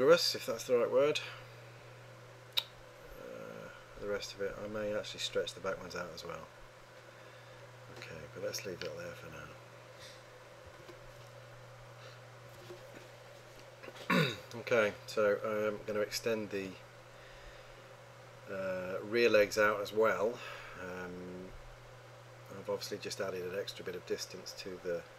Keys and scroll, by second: 11.2 Home.